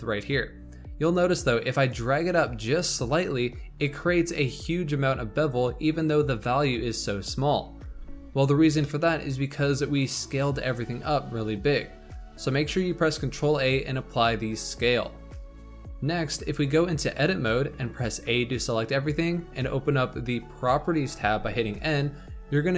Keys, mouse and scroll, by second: 0.2-3.4 shift+drag, 7.9 ctrl+z, 8.4-8.8 scroll down 3, 8.8-11.6 middle drag, 11.6-13.1 scroll up 2, 13.1 ctrl+a, 17.0 Tab, 18.0 a, 21.2 n.